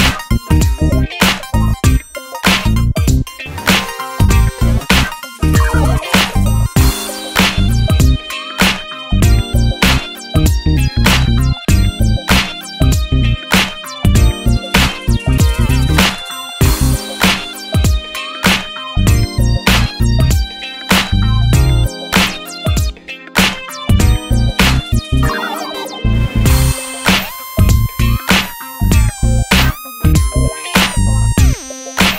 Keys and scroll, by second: 9.8 super+c, 10.4 super+v.